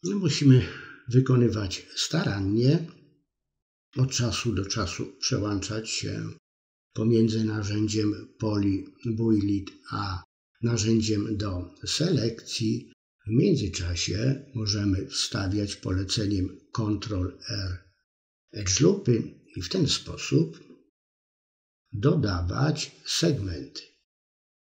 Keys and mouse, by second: 0.6 click, 1.0-2.5 middle drag, 2.8 click, 4.3 click, 5.3 click, 6.1 middle click, 6.8 click, 7.7 click, 8.2 click, 8.5 middle click, 9.4 middle click, 9.9 ctrl+r, 11.0 click, 11.5 middle click, 12.2 middle click, 12.7 click, 13.3 click, 13.9 middle click, 14.4 click, 15.4 click, 16.1 click, 16.6 click, 17.1 ctrl+z, 17.7 click, 18.6 click, 19.1 ctrl+z, 19.3 middle click, 19.6 middle click, 20.0 middle click, 20.2 middle click, 21.4 click, 22.5 ctrl+z, 24.0 shift+click.